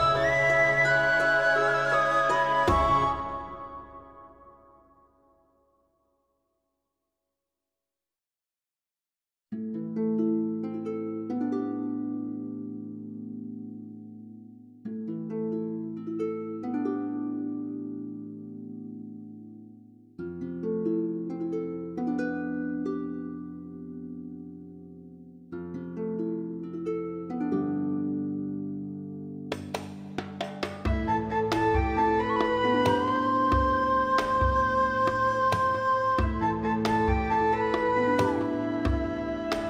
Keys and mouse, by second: 0.1 middle click, 0.2 middle click, 0.6 shift+middle click, 0.9 g, 1.0 g, 1.3 alt+middle click, 1.5 alt+middle click, 1.6 alt+z, 1.8 shift+middle click, 2.1 click, 2.4 alt+z, 2.7 click, 2.9 shift+click, 3.1-6.1 typing, 3.5 click, 4.1 click, 4.8 click, 5.7 click, 6.5 click, 7.2 g, 7.3 g, 7.5 click, 7.9 g, 8.2 click, 8.5 g, 8.9 click, 9.1 middle click, 9.6 alt+middle click, 9.8 alt+middle click, 10.0 alt+z, 10.1 shift+middle click, 10.4 middle click, 10.7 alt+middle click, 10.8 middle click, 11.1 g, 11.7 click, 12.2 middle click, 12.7 shift+middle click, 13.1 shift+middle click, 13.2 alt+z, 13.3 Tab, 13.5 middle click, 13.7 Tab, 13.9 middle click, 14.4 middle click, 14.6 alt+click, 14.9 g, 15.3 click, 15.5 middle click, 15.8 shift+middle click, 15.9 g, 16.2 click, 16.3 middle click, 16.9 middle click, 17.4 alt+click, 17.5 alt+middle click, 17.8 shift+middle click, 18.1 Tab, 18.2 middle click, 18.4 Tab, 19.0 click, 19.3 3, 19.5 shift+click, 19.7 g, 20.2 click, 20.8 middle click, 20.9 click, 21.2 ctrl+z, 21.4 g, 21.7 click, 23.3 ctrl+s, 24.3 click, 24.5 shift+middle click, 25.1 shift+middle click, 25.3 click, 25.9 Tab, 26.0 middle click, 26.6 alt+middle click, 27.3 alt+middle click, 27.6 shift+middle click, 27.9 alt+middle click, 28.0 alt+middle click, 28.2 shift+middle click, 29.0 shift+middle click, 31.4 click, 31.5 middle click, 32.0 shift+click, 32.3 shift+click, 32.6 middle click, 33.0 alt+middle click, 33.2 shift+middle click, 33.6 shift+middle click, 33.8 Tab, 34.1 alt+middle click, 34.4 1, 34.6 alt+z, 35.4 click, 36.4 shift+click, 36.7 shift+click, 37.1 alt+middle click, 38.1 g, 38.2 middle click.